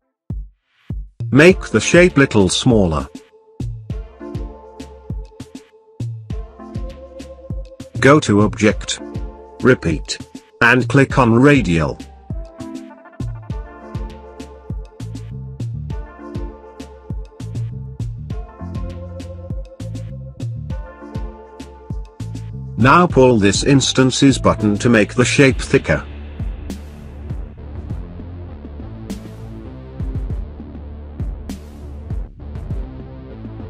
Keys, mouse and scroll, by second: 2.4-7.2 shift+drag, 9.8 click, 11.6 click, 11.9 click, 14.1-20.9 drag.